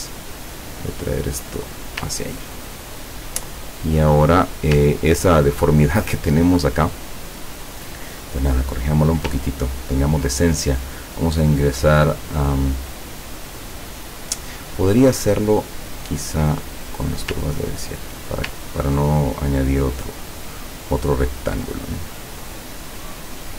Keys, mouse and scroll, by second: 0.7-2.1 drag, 2.2-2.8 ctrl+scroll down 2, 3.8 ctrl+click, 5.1-6.1 ctrl+scroll down 4, 9.5-10.1 ctrl+scroll up 4, 10.2 ctrl+scroll down 2, 11.2 click, 16.7 click, 17.6 ctrl+scroll up 2, 18.6 ctrl+scroll up 2, 21.8 click.